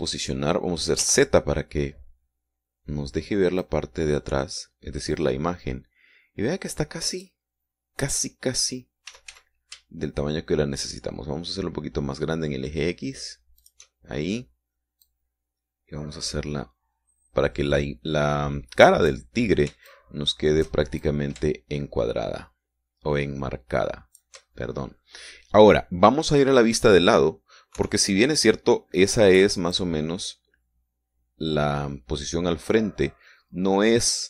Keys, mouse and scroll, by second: 2.3 z, 4.9-8.8 drag, 10.4 s, 10.6 x, 15.0 shift+click, 16.4 click, 21.2 shift+click, 22.4 shift+click, 29.1 KP_3, 31.0-34.2 drag.